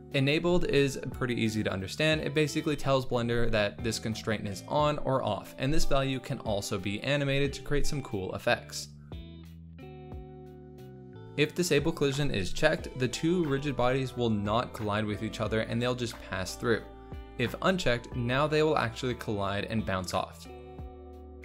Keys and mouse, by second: 1.4 click, 2.8 space, 5.7 click, 9.2 click, 12.5 click, 18.3 click, 20.0 click.